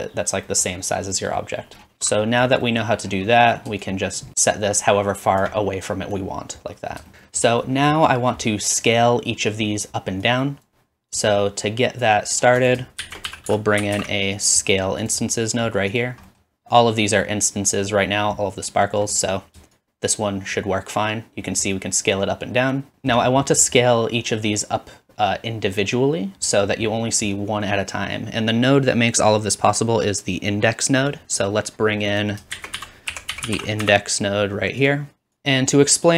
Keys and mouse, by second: 1.9 alt+shift+click, 1.9 x, 3.8 shift+middle click, 4.5-7.1 shift+drag, 10.7-12.6 drag, 12.6 shift+middle click, 13.0 shift+a, 13.5 s, 16.2 typing, 19.9-23.1 shift+drag, 32.3-36.0 shift+drag, 32.6 shift+a, 35.3 typing.